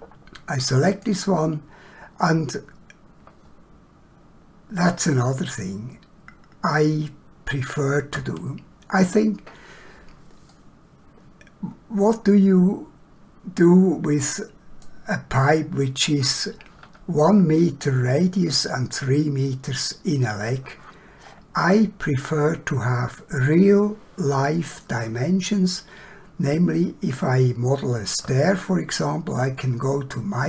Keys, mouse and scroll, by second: 0.9 click, 4.9 scroll down 1, 10.5 middle click, 21.2 middle click, 21.5 scroll down 1, 21.6 scroll up 1, 27.1 middle click.